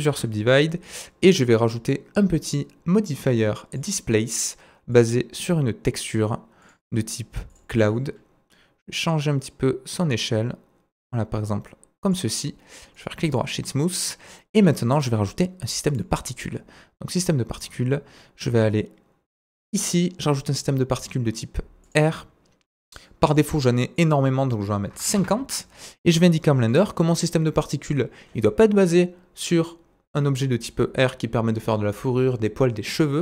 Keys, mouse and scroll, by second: 0.3 Tab, 0.9 click, 1.4-5.5 drag, 5.5-6.1 scroll down 2, 6.1-6.6 drag, 8.2-10.7 drag, 12.5 middle click, 12.9 right click, 13.8 scroll down 1, 14.0 middle click, 14.6-15.9 scroll up 3, 15.9 scroll up 1, 15.9-17.2 drag, 17.2-19.7 scroll up 1, 19.7 click, 19.7-20.6 scroll up 1, 20.6-21.9 scroll up 1, 21.9 scroll up 1, 22.1 click, 22.7 middle click, 23.4 click, 23.9-27.6 middle drag, 26.1 scroll down 2, 27.3-27.6 scroll up 2.